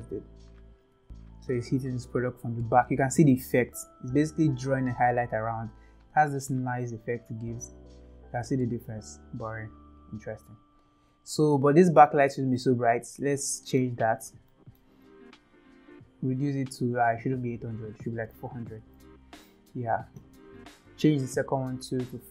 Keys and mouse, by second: 1.0 g, 3.4 shift+middle click, 7.4 click, 12.5 middle click, 13.4-13.8 middle drag, 14.5 shift+middle drag, 15.3 click, 17.2-19.6 drag, 18.6 KP_0.